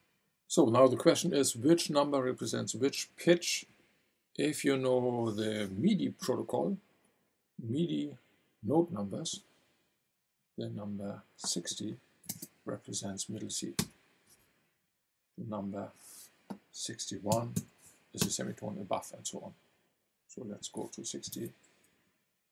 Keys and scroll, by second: 12.2 KP_6, 13.8 Return, 17.3 KP_6, 17.5 KP_1, 18.2 Return, 21.2 KP_6, 21.3 KP_0, 21.9 Return.